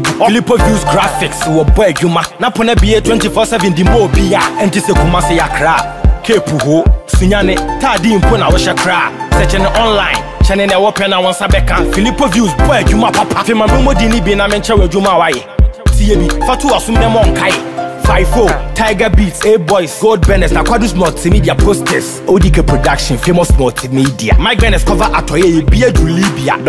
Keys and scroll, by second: 4.6 ctrl+t, 13.7 Return.